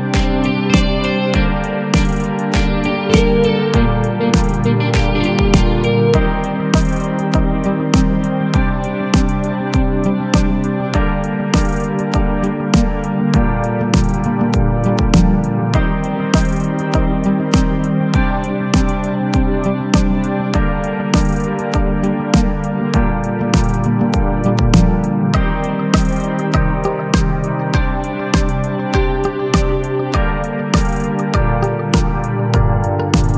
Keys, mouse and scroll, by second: 1.8-4.7 typing, 2.1 ctrl+r, 3.3 ctrl+r, 5.4 Tab, 5.8 KP_Divide, 6.4 a, 6.5 a, 7.0-8.0 middle drag, 8.0-8.4 scroll up 2, 8.5-9.0 middle drag, 9.0-9.7 scroll down 2, 9.9 click, 10.7 KP_7, 12.2 s, 15.0-15.5 scroll down 2, 15.5-16.1 middle drag, 16.1-16.7 scroll up 3, 16.7-17.7 middle drag, 17.7-18.1 scroll up 2, 18.1-18.7 shift+middle drag, 18.7 Tab, 19.1 a, 19.5 s, 22.4 a, 22.5 a, 22.8 Tab, 23.0 scroll down 3, 23.2 a, 23.4 a, 23.7-29.8 middle drag, 30.2 click, 30.9 click, 33.2 shift+a.